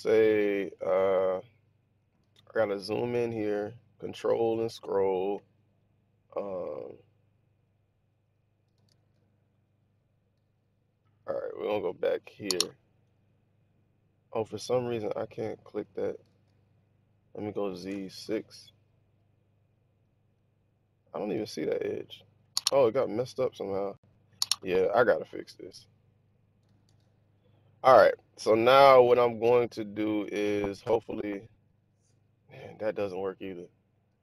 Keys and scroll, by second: 8.8 super+z, 16.2 super+z, 17.3 z, 17.9 6, 26.8 super+z, 30.8 ctrl+=.